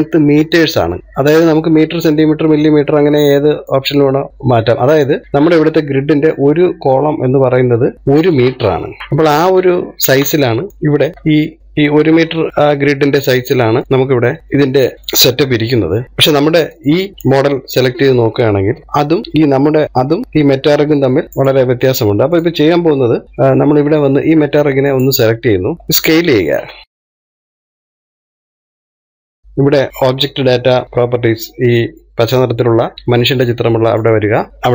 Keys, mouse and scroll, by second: 6.0-6.5 scroll up 1, 8.3-8.9 scroll up 9, 8.9 shift+middle click, 9.4-10.2 shift+middle drag, 10.2-10.7 scroll down 1, 10.7 shift+middle click, 10.9-11.6 scroll down 2, 11.6-11.9 scroll down 12, 11.9-12.9 shift+middle drag, 12.9 scroll up 2, 13.5-16.0 shift+middle drag, 17.3 click, 22.2 click, 23.2 click, 25.7 scroll down 1, 26.8-27.8 scroll down 4, 34.5 click.